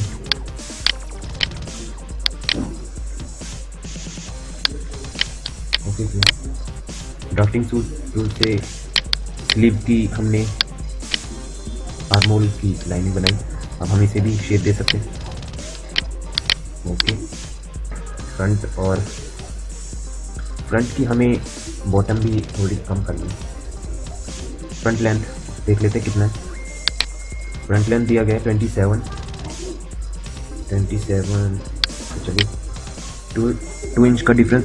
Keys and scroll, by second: 7.1 d, 14.0 q.